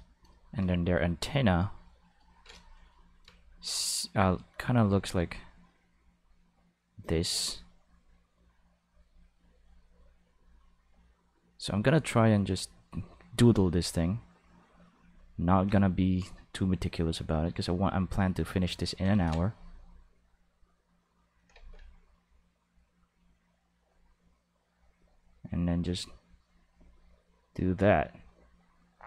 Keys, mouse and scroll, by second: 4.8-5.8 drag, 6.3-7.3 drag, 7.8-8.8 drag, 9.5 click, 10.9 click, 12.4 click, 13.8-14.9 drag, 17.4-19.1 drag, 19.1 ctrl+z, 20.3-21.3 drag, 21.6 ctrl+z, 21.8-23.1 drag, 23.4-24.7 drag, 25.0 click, 25.6 click, 26.2 click, 27.0 click, 27.9 click, 28.6 click.